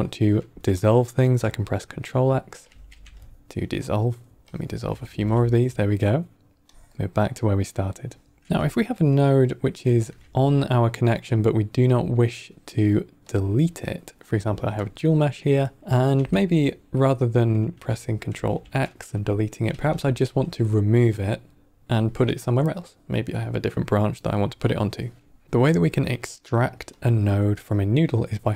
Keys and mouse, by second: 2.7 ctrl+x, 4.4-4.8 drag, 5.0 ctrl+x, 6.6-8.4 drag, 9.8 shift+a, 14.6-15.4 drag, 18.2 ctrl+x, 19.9 ctrl+z, 23.7 click, 26.8 click.